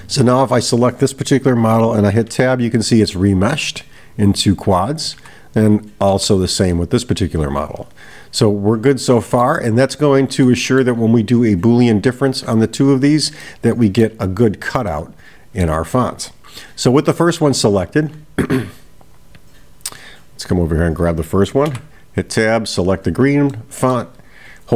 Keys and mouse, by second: 0.2 click, 3.1 middle click, 5.6 click, 6.7-9.6 middle drag, 10.5-10.9 middle drag, 13.4 middle click, 14.9 middle click, 18.2 right click, 19.6 click, 20.8 click, 23.5-24.0 middle drag.